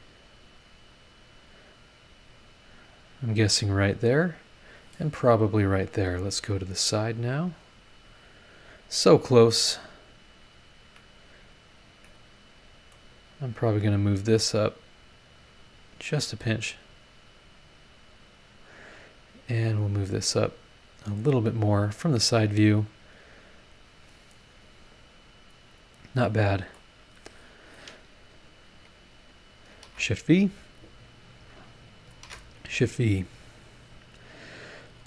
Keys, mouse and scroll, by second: 0.0 click, 1.8 click, 3.1 click, 4.5 click, 6.0 click, 6.5-7.2 scroll down 3, 7.3-8.1 scroll up 4, 9.0 scroll down 2, 9.4 scroll up 2, 10.8 Escape, 12.0-13.1 drag, 12.2 right click, 13.6 click, 14.2-15.2 drag, 15.6 click, 16.6-18.7 drag, 19.3 scroll up 1, 20.1 click, 22.1 click, 23.5 scroll down 2, 24.0 scroll up 2, 25.8 scroll down 2, 26.2 middle click, 26.3 click, 26.3 right click, 28.0 scroll up 2, 29.5 shift+click, 29.8 shift+v, 30.6 click, 31.9 shift+click, 32.2 shift+v, 33.3 click.